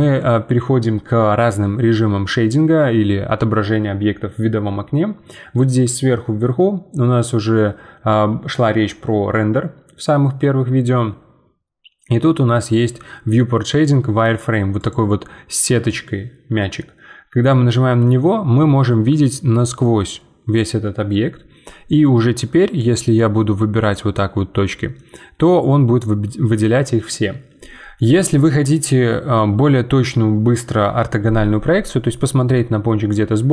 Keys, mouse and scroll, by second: 14.8-17.8 drag, 18.0-21.0 middle drag, 22.8-25.0 drag, 25.0-28.1 middle drag, 31.8-33.5 middle drag.